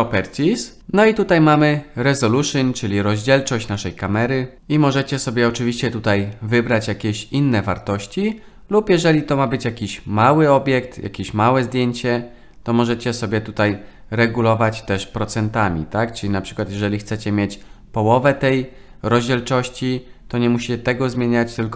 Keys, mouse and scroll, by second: 13.8-16.7 drag.